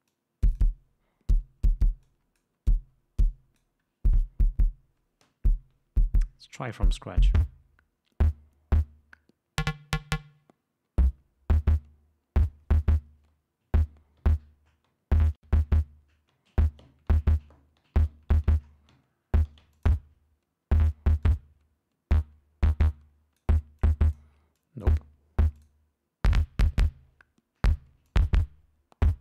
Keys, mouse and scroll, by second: 0.5-1.2 drag, 2.5-3.0 drag, 3.6-4.2 drag, 7.3 click, 20.1 click, 21.6-23.9 drag, 24.2 click, 24.9 click, 25.9 click, 28.4 click.